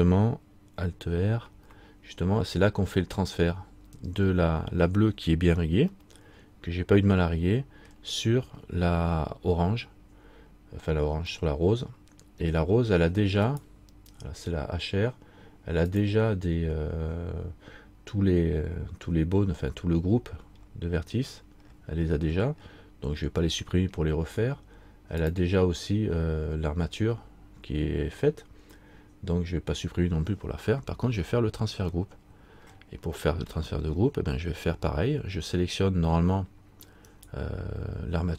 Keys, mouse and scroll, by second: 3.8-4.8 scroll down 1, 6.2 middle click, 11.5 middle click, 13.7 right click, 16.1 click, 19.2-19.9 scroll up 1, 21.5-24.0 scroll down 1, 25.4 click, 32.2 middle click, 33.7 middle click, 37.6 right click.